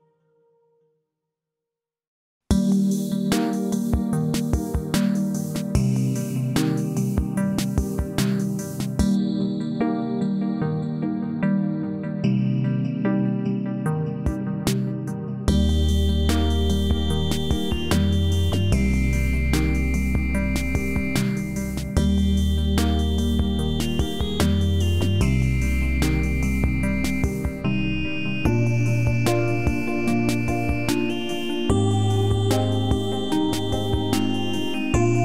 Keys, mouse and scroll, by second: 0.1-0.8 scroll down 1, 0.8 click, 7.0 click, 9.9 space, 12.0 click, 18.3-18.9 scroll down 1, 22.1-22.8 click, 23.0-23.6 scroll up 1, 25.4-28.5 alt+drag, 31.3 space, 33.8 click.